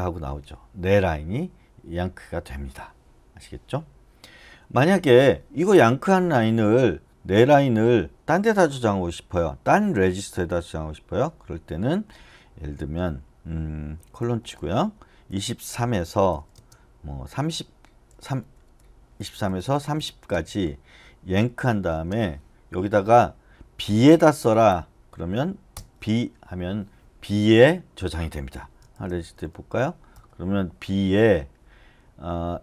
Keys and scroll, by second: 14.2 shift+;, 15.3-18.1 typing, 21.1-21.9 typing, 23.9-24.6 typing, 28.9-30.0 typing, 30.1 Return.